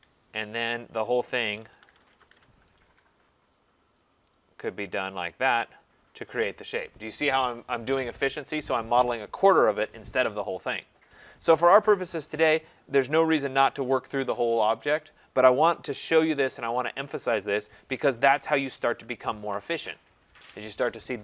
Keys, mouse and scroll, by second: 0.0-0.1 typing, 0.9 click, 1.4-2.7 typing, 4.1 click, 5.6 click, 13.1 middle click, 17.2 middle click, 17.5 click, 18.6 ctrl+z, 19.0 ctrl+z.